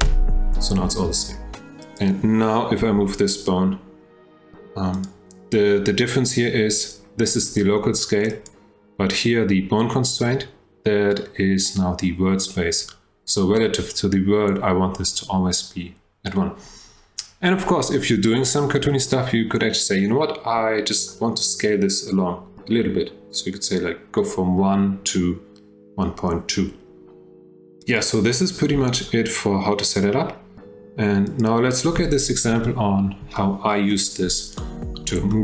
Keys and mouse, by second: 1.8 click, 2.8 g, 8.4 click, 28.0 click, 28.7 g, 33.3-34.0 shift+drag, 34.6-35.0 drag, 35.3-35.4 shift+middle drag.